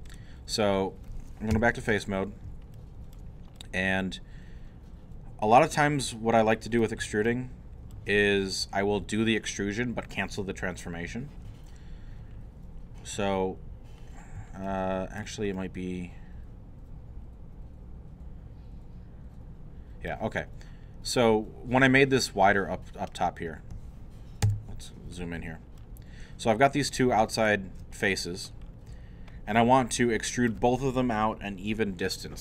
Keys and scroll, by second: 1.5 3, 2.5 alt+3, 24.5 •.